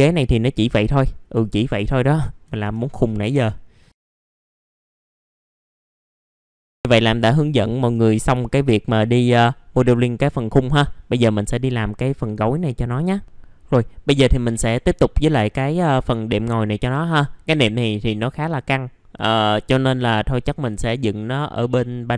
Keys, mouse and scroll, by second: 1.0-2.0 drag, 2.0 click, 2.1 alt+middle click, 3.9 middle click, 4.1-4.9 typing, 4.4 alt+middle click, 4.4 scroll down 1, 4.7 alt+middle click, 4.7 click, 5.2 Delete, 5.4 click, 5.6 scroll down 1, 5.8 middle click, 6.2 scroll down 1, 6.3 alt+middle click, 6.6 scroll up 1, 6.8 middle click, 7.2 alt+middle click, 8.0 middle click, 8.4 alt+middle click, 9.0 middle click, 9.5 alt+middle click, 13.2 ctrl+r, 15.0 alt+middle click, 15.5-15.9 scroll up 1, 15.9 click, 16.3 middle click, 16.9 alt+middle click.